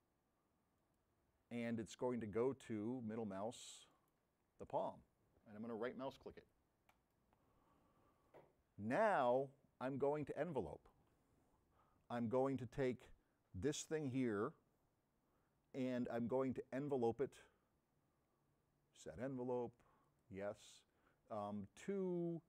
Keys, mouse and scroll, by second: 3.9 middle click, 6.9 right click, 9.5-10.7 drag, 13.0 click, 17.2 click, 20.1 click.